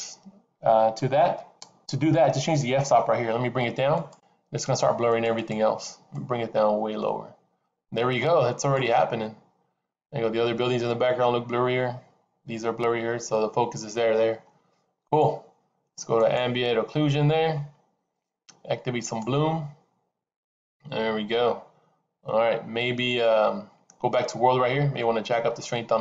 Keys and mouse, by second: 4.6 click, 5.1 click, 6.0-8.7 drag, 18.3 click, 19.6 click, 25.6-26.0 drag.